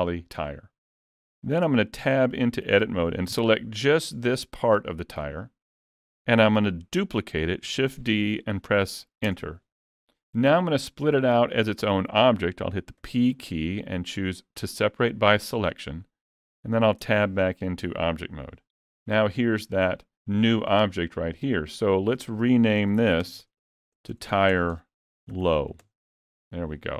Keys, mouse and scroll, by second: 1.7 Tab, 2.1 alt+a, 8.0 shift+d, 17.0 Tab, 19.8 click, 21.4 click, 23.4 BackSpace, 23.8 BackSpace.